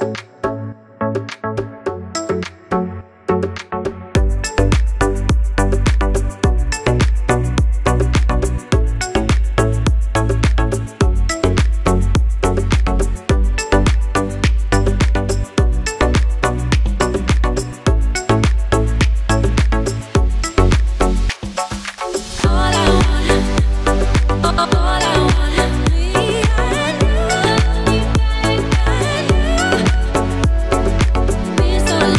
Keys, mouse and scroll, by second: 0.2 i, 3.6 click, 4.5 g, 6.7 click, 7.0 r, 7.3 z, 8.9 click, 9.9 i, 12.0-12.7 drag, 13.5 g, 15.2 click, 15.6 r, 17.3 click, 18.2 i, 20.3 click, 22.2 g, 23.3 click, 23.7 r, 24.4 z, 26.0 click, 27.2 i, 31.1 click.